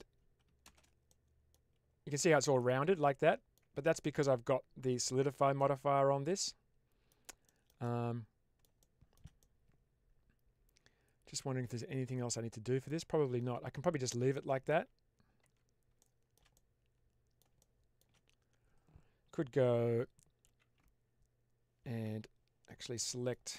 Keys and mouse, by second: 0.5 shift+space, 1.0-1.4 middle drag, 2.0-3.4 middle drag, 3.6 Tab, 5.5-7.0 middle drag, 7.4 shift+middle click, 7.7 middle click, 8.7 shift+middle click, 9.3-12.7 middle drag, 12.9 Tab, 13.7 Tab, 14.2 middle click, 14.6 Tab, 15.3 Tab, 16.0 middle click, 16.4 middle click, 17.5 middle click, 20.3 ctrl+r, 22.8 middle click.